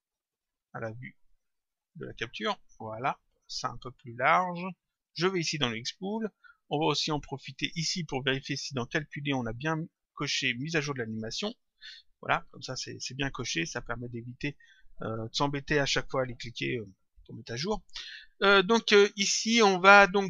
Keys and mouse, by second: 1.1 click, 2.9 click, 4.8 click, 6.9 click, 8.7 click, 11.1 click, 12.4 click, 14.4 click.